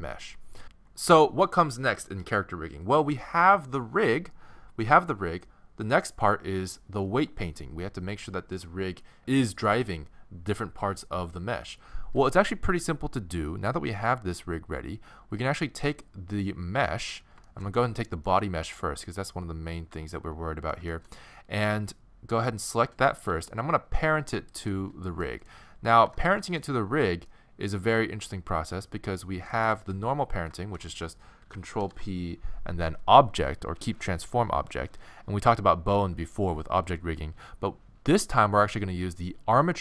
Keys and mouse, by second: 0.6-2.3 middle drag, 15.9-17.5 right drag, 17.5 middle click, 18.5-20.4 middle drag, 20.9-23.3 middle drag, 23.3 z, 26.1 alt+z, 29.1 middle click, 31.8 ctrl+p.